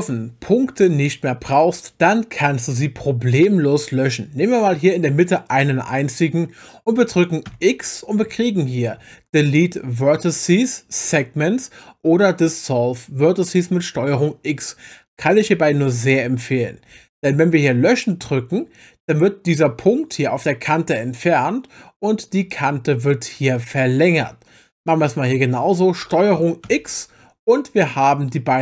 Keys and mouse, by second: 5.3 click, 7.5 x, 24.7 click, 26.6 ctrl+x.